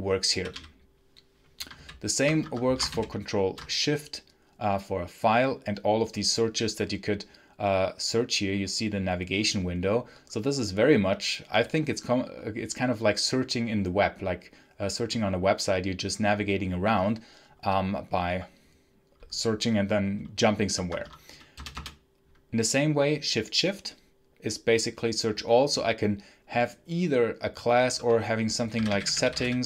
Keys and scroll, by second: 0.0-0.4 typing, 1.6 ctrl+n, 2.3 Escape, 2.8 ctrl+shift+n, 20.7 Escape, 27.9-29.6 typing.